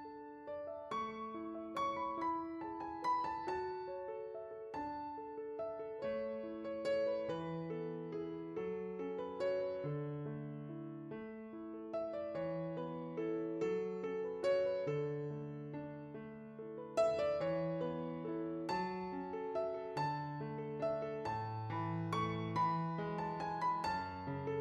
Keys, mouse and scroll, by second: 2.4 ctrl+z.